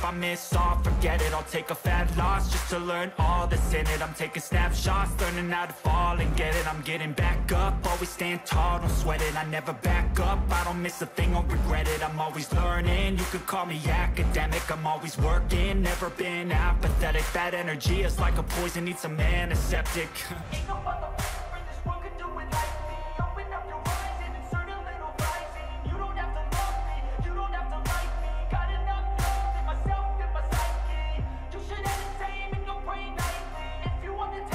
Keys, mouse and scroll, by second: 21.2 double click, 24.2 click.